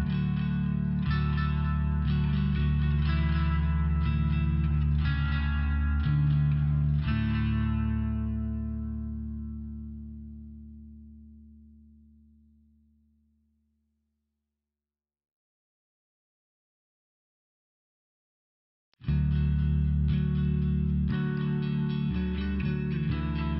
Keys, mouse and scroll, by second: 1.0 click, 3.4 click, 4.7 click, 6.5 click, 6.8 click, 7.2 click, 7.5 click, 7.8 click, 8.1 click, 8.3 click, 8.4 click, 8.6 click, 8.8 click, 9.0 click, 9.0 click, 9.2 click, 10.8 click, 11.1 click, 11.5 click, 11.8 click, 12.0 click, 12.1 click, 12.3 click, 12.4 click, 12.7 click, 12.7 click, 13.0 click, 13.3 click, 14.6 click, 14.7 click, 17.0 click, 17.2 click, 18.2 click, 18.3 click, 20.5 click, 22.0 click.